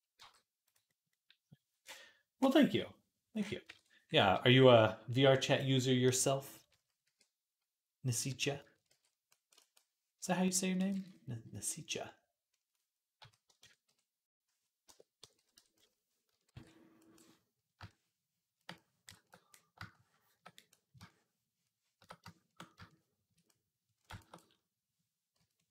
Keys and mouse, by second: 3.1 click, 3.5 ctrl+Tab, 6.8 r, 8.7 ctrl+r, 10.1-25.7 drag, 10.8 ctrl+z, 16.3 ctrl+r, 25.1 i.